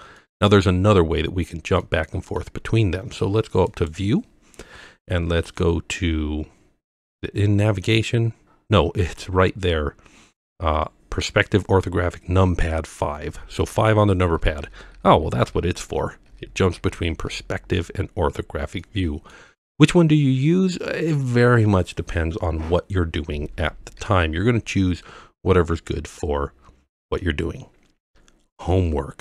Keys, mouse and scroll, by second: 0.2-0.7 middle drag, 1.4-1.8 scroll down 2, 1.8-2.4 middle drag, 3.7-13.0 drag, 14.3-17.3 typing, 18.3-18.8 scroll up 1, 18.8-19.3 middle drag, 19.7-20.7 middle drag, 24.0 KP_5, 25.1-25.4 scroll down 1, 25.4-27.2 middle drag.